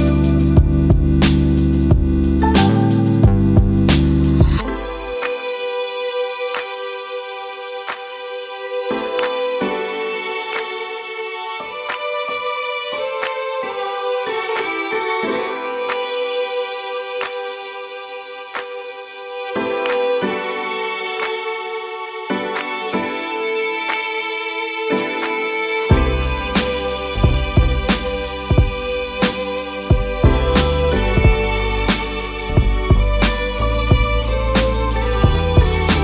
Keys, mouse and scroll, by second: 1.4-12.8 drag, 19.6-22.3 alt+drag, 25.0 right click, 27.9 click, 30.9-36.0 alt+drag.